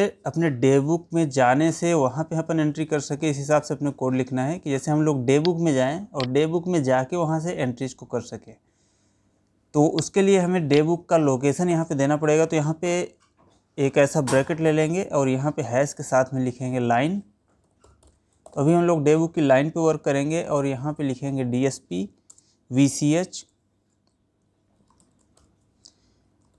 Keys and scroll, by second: 22.8 space.